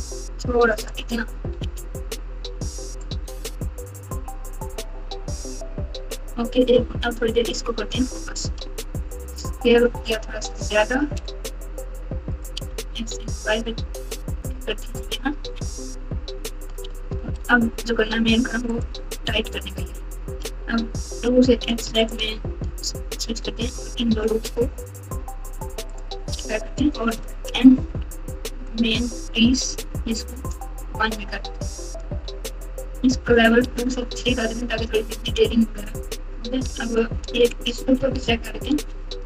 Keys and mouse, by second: 1.6 alt+z, 3.5 KP_2, 3.7 KP_2, 3.9 KP_2, 4.1 KP_2, 5.2 KP_4, 5.4 KP_4, 5.5 KP_4, 6.1 KP_Divide, 6.7 KP_Add, 7.1 KP_Add, 7.2 KP_Add, 8.1 KP_4, 8.4 KP_4, 9.2 s, 12.5 s, 15.4 KP_6, 15.6 KP_6, 16.0 KP_6, 17.3 ctrl+r, 20.4 3, 21.1 2, 22.0 alt+click, 25.9 alt+shift+click, 27.5 n, 28.6-30.5 drag, 32.1 Tab, 33.8 click, 34.8 Tab, 36.8 alt+click, 37.9 alt+z.